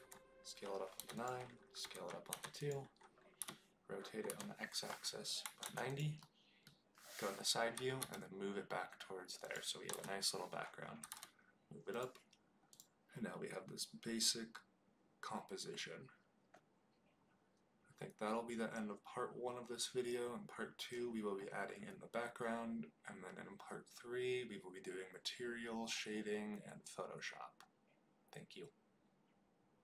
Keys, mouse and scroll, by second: 0.9 9, 1.1 click, 1.8 s, 2.2 2, 2.5 click, 3.3 r, 4.2 x, 5.4 KP_9, 5.6 KP_0, 5.8 click, 6.1-6.6 middle drag, 7.7 g, 7.9 y, 9.4 click, 9.9 KP_0, 10.9 g, 11.0 z, 11.9 click, 12.6 click.